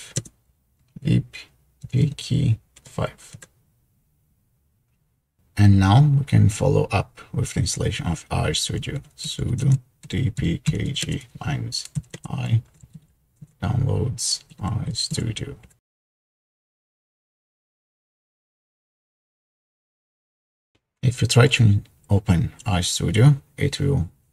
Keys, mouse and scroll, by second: 0.5-2.0 typing, 3.3 typing, 9.1-15.9 typing.